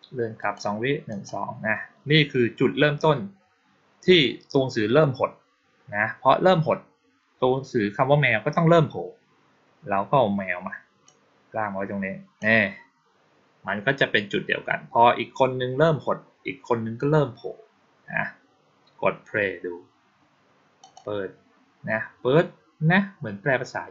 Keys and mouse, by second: 0.2 click, 1.0 click, 10.9-12.2 drag, 20.7 click.